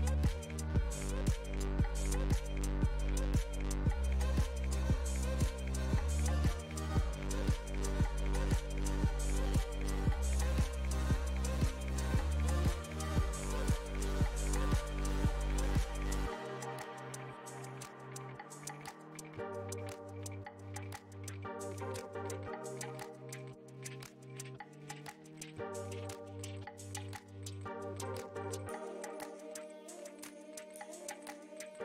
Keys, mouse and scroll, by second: 1.2-2.6 middle drag, 2.6-3.9 drag, 3.9 middle click, 4.8-6.6 drag, 6.6-7.6 middle drag, 7.6-9.1 drag, 9.1 middle click, 9.9-11.1 drag, 11.1-14.9 middle drag, 14.9-19.3 drag, 20.3-22.1 middle drag, 22.1 f, 22.9-24.1 drag, 24.1-27.1 middle drag, 27.1 click, 28.4-31.0 middle drag, 31.0-31.8 ctrl+drag.